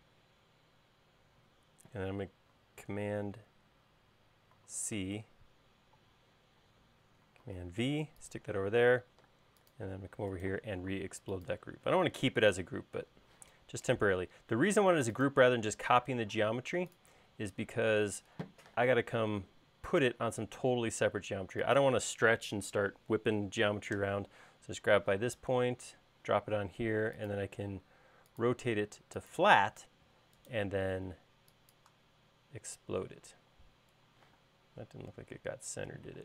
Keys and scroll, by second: 4.7 super+c, 7.6 super+v, 9.5 space, 13.5 m, 16.3 space, 18.8 m, 25.3 q, 29.9 space, 34.4 m.